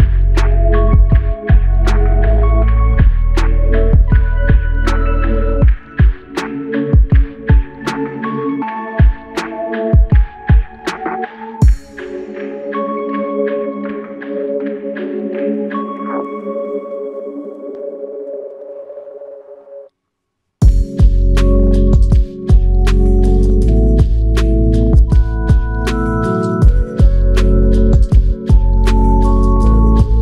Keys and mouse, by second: 0.0 double click, 0.5 alt+click, 2.1 ctrl+click, 3.8 double click, 4.2 shift+click, 5.8 alt+click, 6.8 shift+click, 8.6 alt+click, 9.6 f, 10.4 double click, 15.2 shift+click, 15.5 shift+double click, 15.9 shift+click, 17.6 alt+click, 19.2 double click, 20.0 alt+click, 21.9 alt+click, 22.8 double click, 23.4 shift+click, 24.5 alt+click, 26.4 alt+click, 27.2 ctrl+alt+click, 30.0 typing.